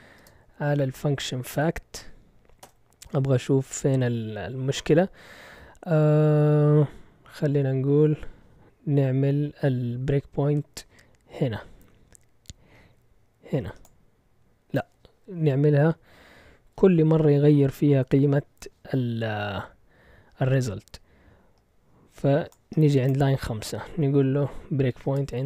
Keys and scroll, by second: 0.0-2.0 typing, 2.6 Return, 4.8 typing, 24.9-25.4 typing.